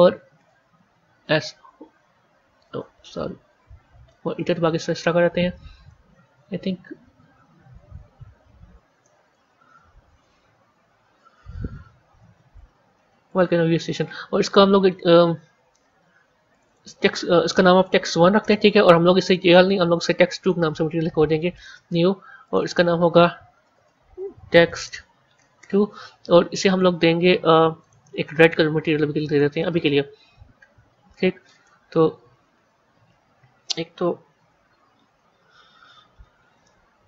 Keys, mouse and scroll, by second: 0.3 BackSpace, 1.2 s, 2.6 BackSpace, 2.9 shift+s, 3.3 Left, 4.3 Return, 5.1 Up, 5.4 Right, 5.6 Right, 6.9 Right, 7.8 BackSpace, 9.0 shift+v, 10.9 Tab, 12.0 g, 16.4 click, 16.6-19.5 drag, 20.3-22.4 drag, 22.5-25.5 drag, 27.7 click, 32.0 KP_3, 32.4 KP_1, 34.4 KP_1, 34.8 KP_3, 36.5-37.0 middle drag.